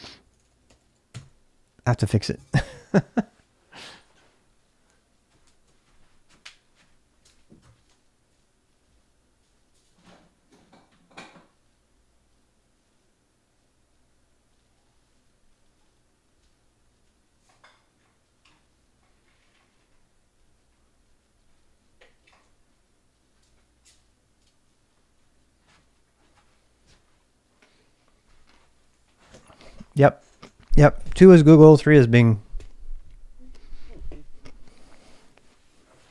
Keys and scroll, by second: 0.0-1.2 typing, 4.4-5.1 typing.